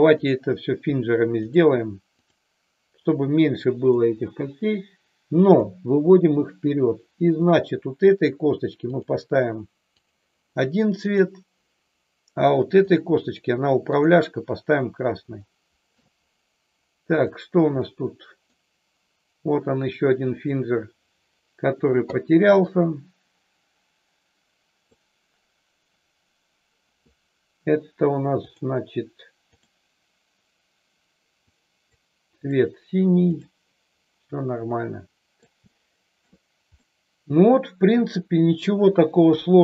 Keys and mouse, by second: 0.1-1.6 drag, 3.9-5.5 drag, 7.3 click, 8.9 click, 9.9 click, 11.0 click, 12.9 click, 14.0 click, 15.4 shift+middle click, 17.1 click, 17.7 middle click, 20.4 click, 22.6-24.9 drag, 28.4 click, 29.5 click, 31.5 click, 33.3 click, 34.7-35.4 middle drag, 35.6-36.2 shift+middle drag, 36.7-37.5 middle drag, 39.2 KP_3.